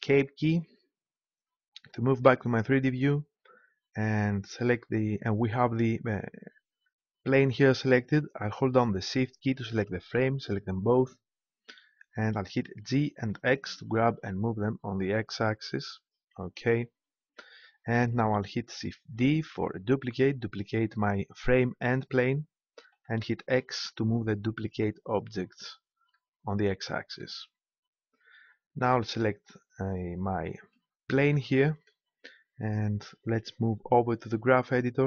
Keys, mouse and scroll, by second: 9.7-11.3 right drag, 12.7 g, 16.0-17.8 drag, 19.3 shift+d, 25.1-26.8 drag, 30.6 right click.